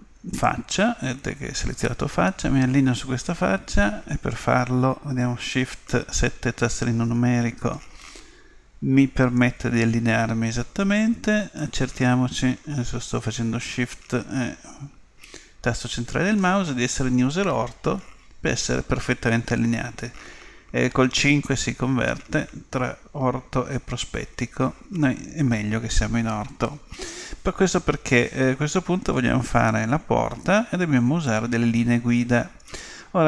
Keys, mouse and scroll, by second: 0.3-2.2 right drag, 11.6-13.4 middle drag, 18.0 KP_5, 24.6 KP_5.